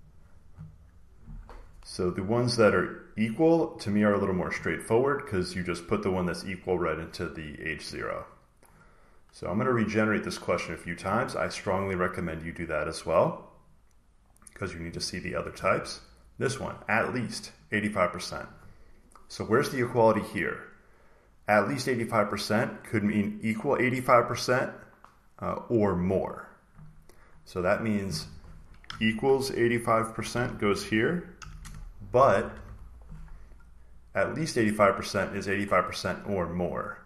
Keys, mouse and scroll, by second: 3.7 click, 5.7 click, 6.3 click, 7.6 click, 10.5-12.6 drag, 13.5 click, 14.2-15.6 drag, 17.5-19.6 drag, 27.7-29.8 drag, 29.8-32.4 typing, 32.2 Left, 35.3 click.